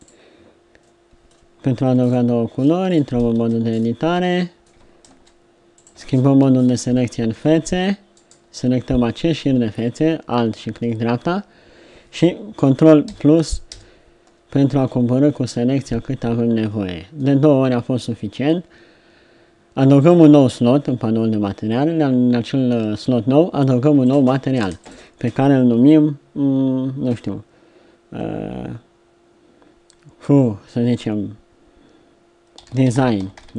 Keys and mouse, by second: 0.1 middle click, 0.8-4.4 middle drag, 3.4 Tab, 5.0 ctrl+Tab, 19.9-21.9 drag, 24.1 click.